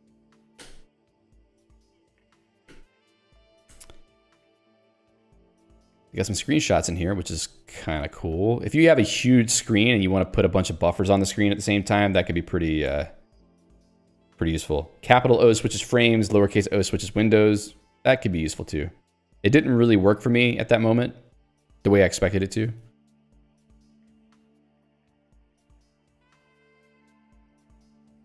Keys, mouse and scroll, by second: 0.2 ctrl+g, 1.3 Escape, 2.8 ctrl+alt+j, 3.8 ctrl+g, 4.9 ctrl+d, 10.3 ctrl+u, 12.6 ctrl+d, 20.7 click, 22.2 ctrl+g, 22.7 Escape, 23.9 j.